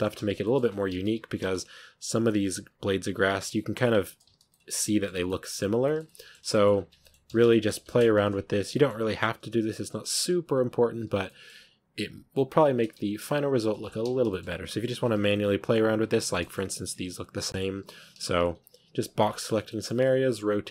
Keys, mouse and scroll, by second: 0.0-1.0 typing, 0.2 scroll down 1, 0.3 shift+middle drag, 0.6 Tab, 2.0 b, 2.1 r, 2.5 g, 3.3 ctrl+r, 3.8 g, 4.2 z, 4.4 middle click, 5.0 Tab, 5.1-6.5 middle drag, 6.5 scroll up 1, 6.8 Tab, 6.9-7.2 middle drag, 7.2 z, 7.4 shift+middle drag, 7.6 a, 8.4 b, 8.6-9.7 middle drag, 9.7-14.0 typing, 13.5 Tab, 13.6 scroll down 5, 14.2-14.8 shift+middle drag, 14.8 scroll up 3, 15.2-15.6 middle drag, 15.6-16.0 scroll up 1, 16.0-17.6 shift+middle drag, 17.6-20.7 typing, 19.0-19.5 middle drag, 19.5-19.8 scroll up 1.